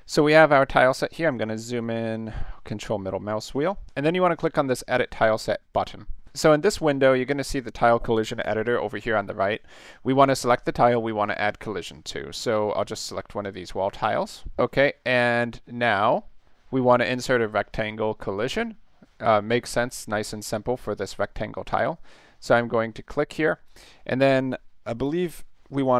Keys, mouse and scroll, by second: 0.3 ctrl+middle click, 0.6 ctrl+middle click, 1.3 ctrl+middle click, 2.2 ctrl+middle click, 5.7 click, 9.6-10.4 middle drag, 13.4 click, 14.6 middle click, 23.1 click.